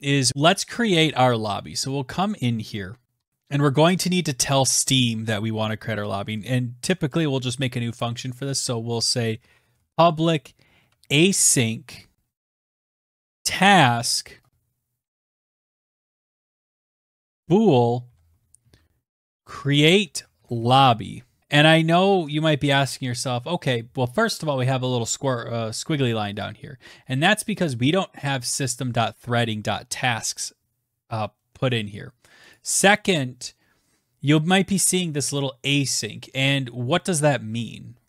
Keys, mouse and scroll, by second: 0.0 scroll, 1.6 click, 2.4-2.8 scroll, 3.0 click, 3.3 click, 4.0 Return, 6.2 shift+Return, 7.0 shift+Tab, 7.8 shift+Return, 8.0-10.9 typing, 11.6 Return, 12.1-22.2 typing, 25.5 click, 26.7 click, 29.3 click, 34.3 click, 34.4 click.